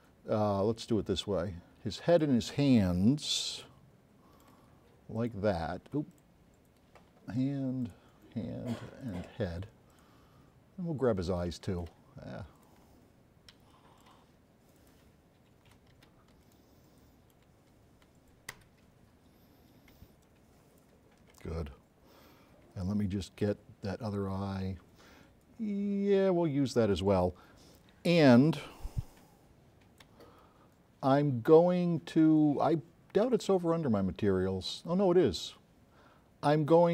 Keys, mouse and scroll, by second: 0.9 click, 2.2 shift+click, 3.5 s, 3.6 right click, 5.2 shift+click, 6.2 shift+click, 7.9 shift+click, 9.1 shift+click, 10.0 shift+click, 10.6-11.1 shift+scroll up 4, 11.4 s, 11.5-11.9 right drag, 12.6 click, 13.7 s, 13.8 right click, 14.8 click, 16.0 s, 16.5 shift+right click, 18.6 Escape, 20.3 ctrl+click, 22.8 s, 22.8 right click, 29.1 s, 29.1-30.2 drag, 33.3 click.